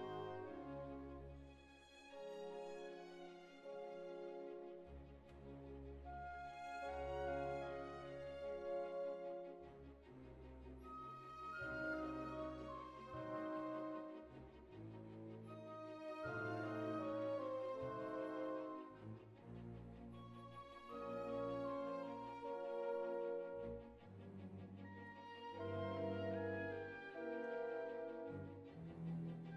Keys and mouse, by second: 0.2-1.2 drag, 2.1 middle click, 2.8 click, 3.7 click, 4.3 e, 5.3 s, 7.0 ctrl+z, 8.3 middle click, 8.8 z, 10.5 k, 14.9 z, 16.2-21.9 drag, 23.2 z, 25.3 e, 27.6 s, 28.6-29.5 drag.